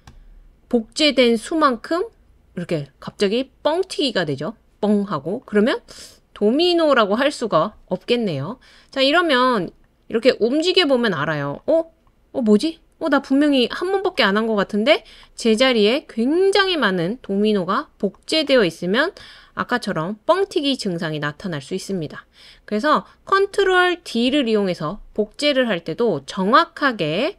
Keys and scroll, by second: 24.3 BackSpace.